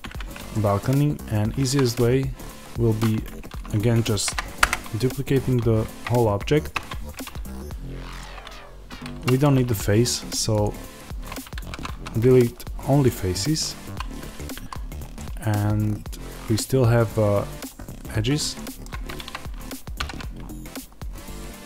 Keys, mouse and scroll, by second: 0.0-3.5 middle drag, 0.0-0.4 scroll up 2, 3.0 Tab, 3.5 click, 4.0 shift+d, 4.6 Return, 6.7 Tab, 8.1 click, 9.0 3, 9.2-10.5 drag, 10.5 x, 11.5 ctrl+z, 12.9 x, 13.7 2, 14.3 click, 14.5 a, 15.1-20.1 middle drag, 18.8-19.9 scroll down 1, 19.9 ctrl+r.